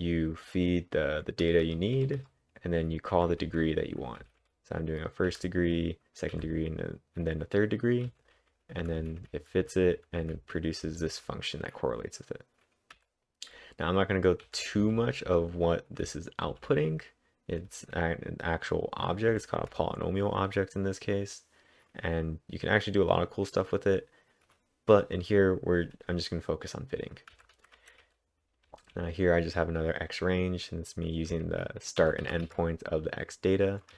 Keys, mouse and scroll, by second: 1.2-2.0 typing, 3.5-5.3 typing, 6.4 typing, 8.1 k, 10.0-11.1 typing, 14.6-16.6 typing, 27.3-29.4 typing, 31.3 typing.